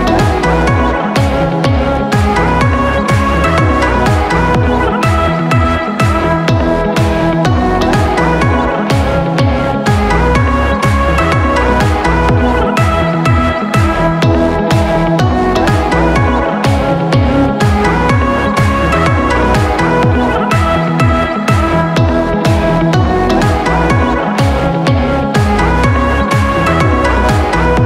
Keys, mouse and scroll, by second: 10.0-27.8 drag.